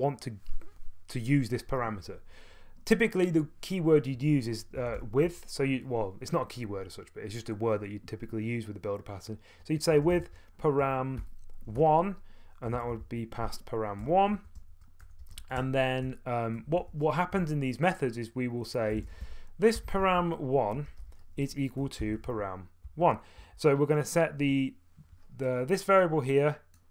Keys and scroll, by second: 4.5-5.8 typing, 9.7-16.6 typing, 16.0 Return, 16.8 Tab, 17.3 Tab, 18.7-23.9 typing.